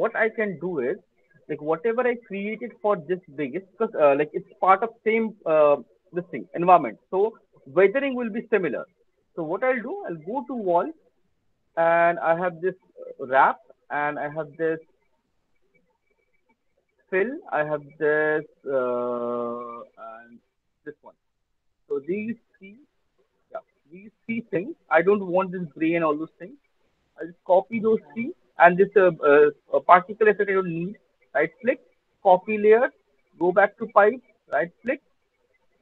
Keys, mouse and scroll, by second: 11.5 click, 11.5 middle click, 12.8 click, 13.6 middle click, 14.0 middle click, 16.7-17.1 scroll, 17.1 ctrl+click, 19.2-20.1 scroll, 21.1 ctrl+click, 22.9 click, 23.1 middle click, 23.4 click, 23.8 ctrl+click, 26.6 middle click, 31.3 right click, 32.6 click, 33.3 click, 34.8 right click.